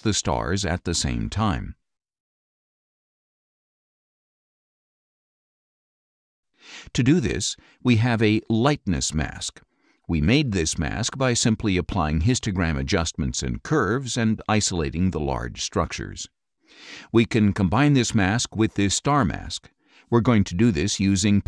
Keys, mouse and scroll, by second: 1.0 click, 3.1 click, 4.1 click, 6.3 click, 8.0 click, 17.2 click, 18.8 click.